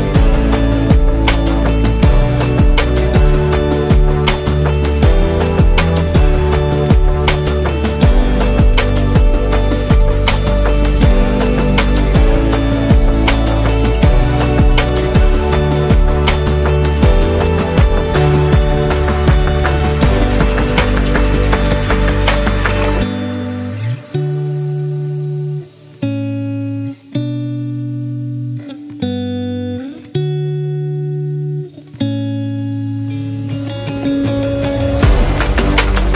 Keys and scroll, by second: 1.0 v, 4.3 space, 9.7 super+-, 10.9-13.2 typing, 14.5-15.0 typing, 20.5-21.8 typing, 23.2 super+0, 23.9 z, 24.8 v, 32.8 space, 35.6 r.